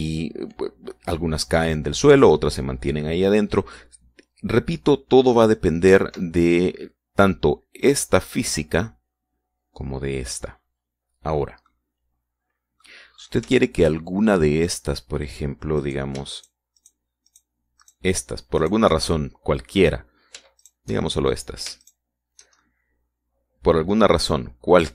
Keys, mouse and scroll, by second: 6.7 Escape, 12.5-13.8 drag, 14.0 middle click, 15.0 shift+middle click, 15.2 click, 16.6 right click, 17.2 shift+right click, 17.6 shift+right click, 18.1 shift+right click, 18.7 shift+right click, 19.4 shift+right click, 21.5 shift+right click, 22.7 shift+right click, 22.9 shift+middle click, 23.4 shift+right click, 24.0-24.9 drag.